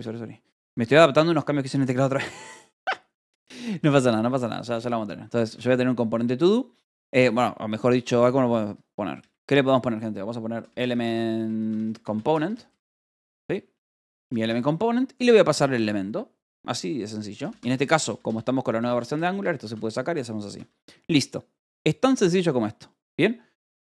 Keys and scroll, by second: 0.0-3.0 typing, 4.9 Left, 5.0-6.9 typing, 8.4 e, 8.9 BackSpace, 10.5-14.9 typing, 15.6 Escape, 17.1-20.8 typing, 22.3 k, 23.4 h.